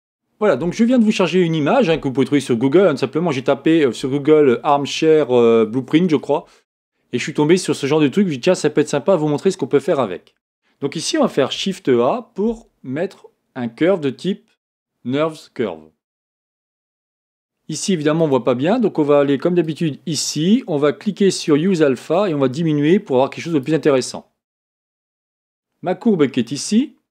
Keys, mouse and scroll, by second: 11.5 shift+a, 18.2 click, 19.6 click, 21.4 click, 22.1-27.1 drag.